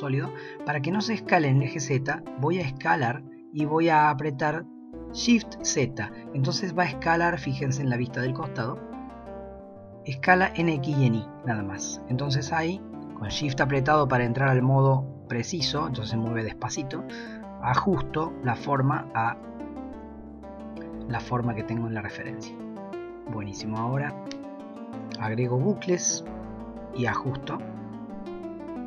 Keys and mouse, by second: 2.6 s, 24.0 ctrl+r, 25.8 s.